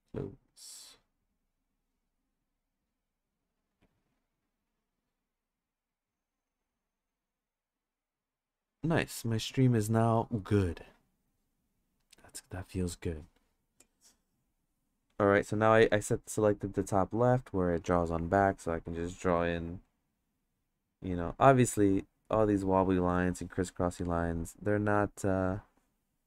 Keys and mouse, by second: 19.4-21.6 drag, 22.3-26.2 drag.